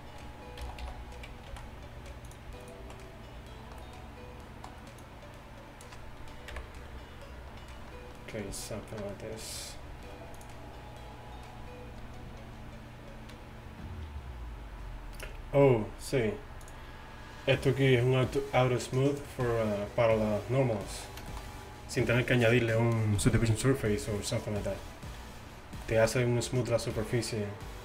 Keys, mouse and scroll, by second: 0.7 g, 2.7 right click, 2.7 click, 6.6 KP_1, 16.7-20.7 drag, 23.0-27.8 middle drag.